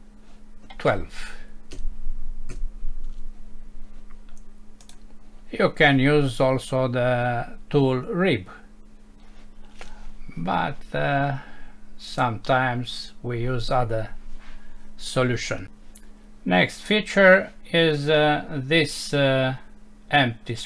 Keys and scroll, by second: 12.5 F6.